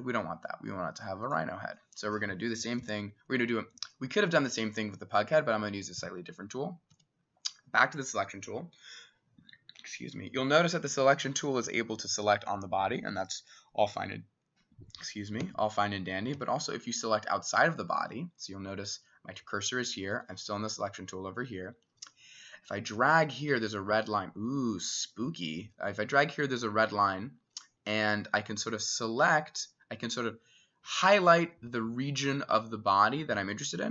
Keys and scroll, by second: 2.8 s, 3.4 Escape, 5.8 typing, 6.9 s, 15.4 Escape, 16.4 s.